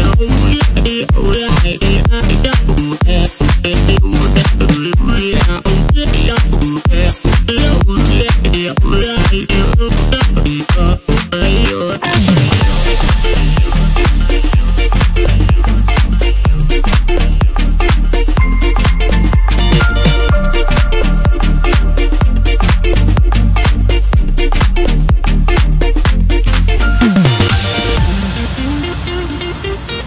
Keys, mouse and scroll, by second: 0.5 s, 5.0-5.4 scroll down 2, 6.1-7.3 scroll up 1, 7.3-8.8 drag, 8.8-10.8 scroll up 2, 12.3-13.8 drag, 14.9 click, 15.6 click, 16.9 shift+click, 18.8-20.1 drag, 20.1-21.4 scroll down 2, 21.9-22.5 drag, 24.8 click, 25.5 click.